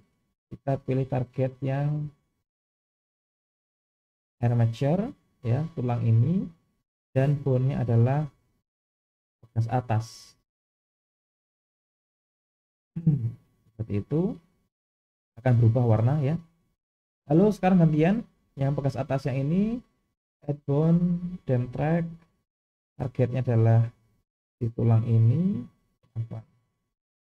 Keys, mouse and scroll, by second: 2.0 click, 7.3-11.9 drag, 14.2 click, 19.7-21.8 drag, 22.6-24.3 drag.